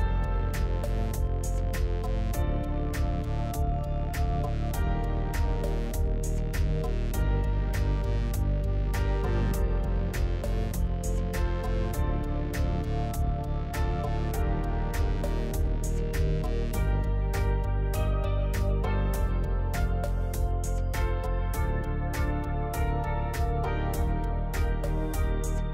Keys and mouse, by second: 3.0 click, 7.8 click, 8.8 g, 10.6 ctrl+r, 12.6 alt+z, 13.3 click, 14.5 KP_3, 14.7 alt+z, 15.6 ctrl+z, 16.9 ctrl+z, 17.0-18.2 ctrl+z, 20.9 ctrl+r, 24.8 alt+z, 25.2 click.